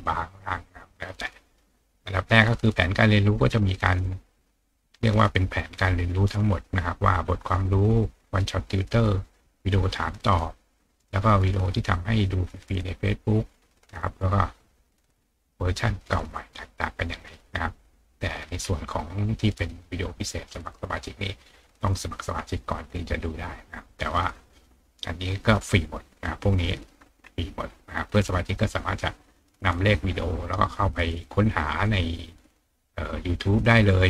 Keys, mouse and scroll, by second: 3.2-3.7 scroll down 2, 4.0-4.7 scroll up 4, 18.6 scroll down 2, 22.4-23.0 scroll up 2, 24.3 scroll down 2, 27.2-28.2 scroll down 2, 28.8 scroll up 2.